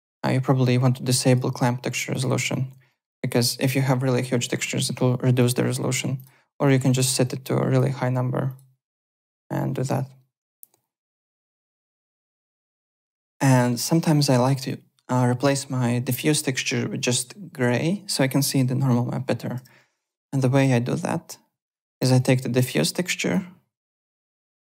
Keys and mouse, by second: 1.2 click, 2.1 click, 2.9 alt+middle click, 5.4 click, 6.1 click, 7.2 click, 8.4 click, 11.3 click, 12.0 alt+click, 12.1 alt+middle click, 12.4 alt+Tab, 12.9 alt+click, 13.2 `, 13.3 click, 13.5 alt+middle click, 13.7 alt+right click, 14.1 alt+click, 19.6 m, 21.6 click, 22.1 click, 22.7 click.